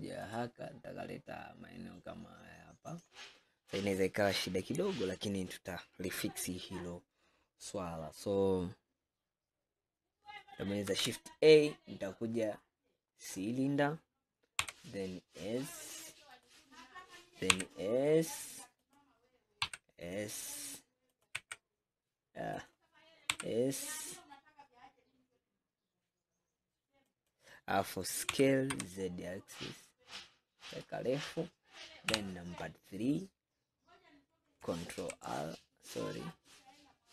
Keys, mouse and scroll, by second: 0.3-3.1 drag, 10.9 shift+a, 14.7 s, 17.6 s, 21.5 s, 23.4 s, 28.4 s, 32.1 KP_3, 33.1-33.5 scroll up 4, 35.0 ctrl+r, 36.4-37.1 right drag.